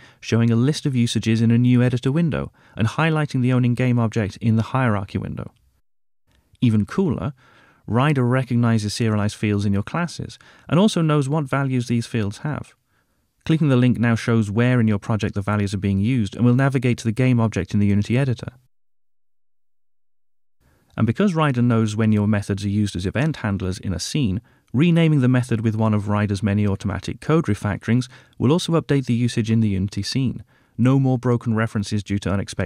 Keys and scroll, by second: 23.8 ctrl+t.